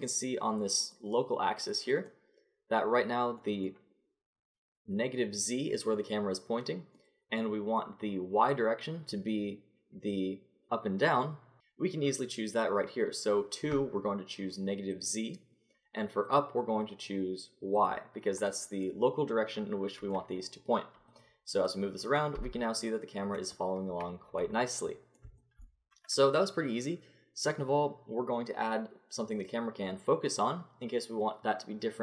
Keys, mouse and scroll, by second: 0.9-2.6 drag, 2.6 middle click, 14.9-17.8 drag, 18.1 click, 18.7-20.3 middle drag, 21.1-22.4 drag, 22.4 g.